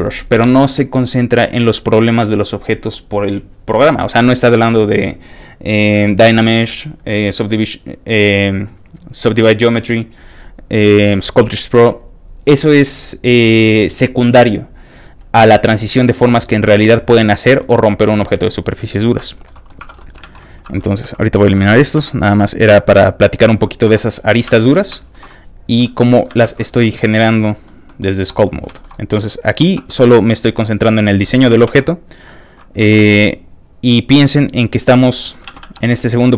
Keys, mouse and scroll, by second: 16.7 middle click, 17.4 middle click, 18.2 middle click, 18.8-19.2 scroll down 1, 19.2 shift+middle click, 19.5 middle click, 19.8 Tab, 20.0 middle click, 20.3 alt+a, 21.1 l, 23.4 alt+middle click, 23.4 x, 23.9 x, 23.9 click, 24.2 middle click, 24.5 Tab, 24.7 middle click, 24.9 shift+middle click, 25.2 scroll down 1, 25.2-25.6 scroll up 3, 25.3 middle click, 25.6 click, 25.8 shift+middle click, 26.1 scroll up 2, 26.1 shift+middle click, 26.5 ctrl+Tab, 26.7 middle click, 27.5 middle click, 27.8 middle click, 28.7 shift+middle click, 28.9 middle click, 29.2 click, 29.2 shift+f, 29.4 middle click, 29.8 f, 29.8 click, 30.3 click, 31.2 middle click, 31.5 ctrl+z, 31.8 click, 31.8 f, 32.1 click, 32.8 ctrl+z, 33.1 click, 33.1 f, 33.3 click, 33.5 click, 33.8 click, 34.0 click, 34.2 click, 34.4 click, 34.9 middle click, 35.5 ctrl+z, 35.7 f, 35.7 click, 35.9 middle click.